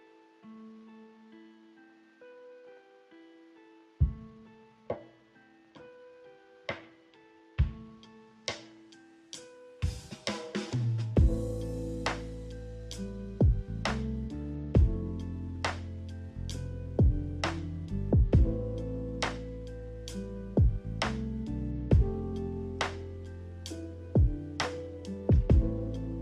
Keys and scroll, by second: 7.1 m, 10.5 Escape, 11.1 ctrl+z, 23.7 a.